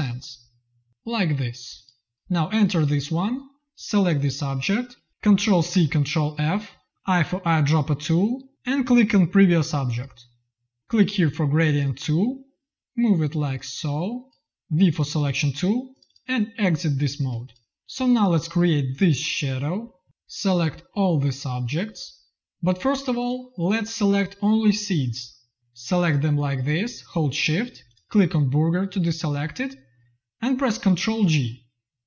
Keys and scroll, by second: 5.4 ctrl+c, 6.2 ctrl+f, 16.7 space, 17.2 v, 17.8 z, 18.2 v, 20.0 z, 20.0 v, 30.9 ctrl+g.